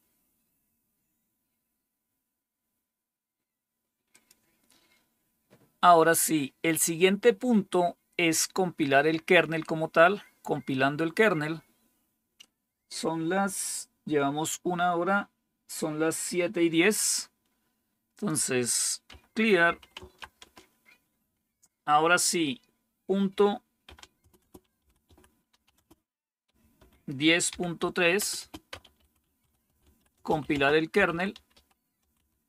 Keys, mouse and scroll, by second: 1.4-4.0 scroll down 1, 4.0 click, 18.0 click, 19.0-20.6 typing, 23.7-32.4 typing.